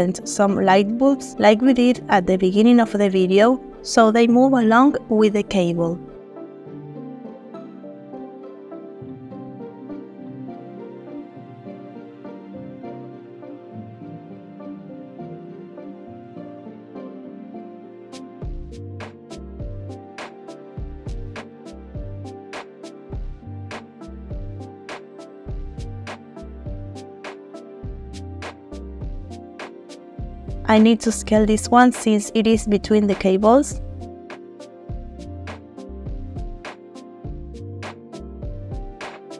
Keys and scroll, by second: 4.2 r, 6.2 g, 6.4 z, 9.1 r, 10.6 g, 10.7 x, 12.6 g, 12.8 z, 15.9 r, 17.3 z, 25.4 ctrl+p, 27.5 space, 30.6 s, 33.8 g, 34.0 z.